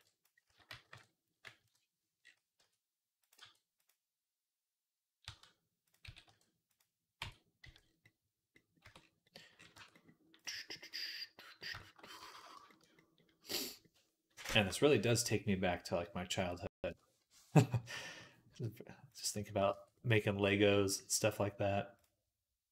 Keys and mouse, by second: 0.7 s, 1.4 KP_3, 1.5 middle click, 1.9-9.4 drag, 2.5 r, 3.3 g, 5.1 s, 5.9 s, 7.0 Tab, 7.5 z, 8.7 Tab, 9.6 Tab, 10.8 middle click, 12.2 ctrl+s, 12.8-14.4 drag, 14.6-16.3 drag, 16.8-18.0 middle drag, 18.1 click, 19.2 shift+middle click, 19.5 Tab, 20.0 shift+middle click, 21.8 click, 22.5-22.7 middle drag.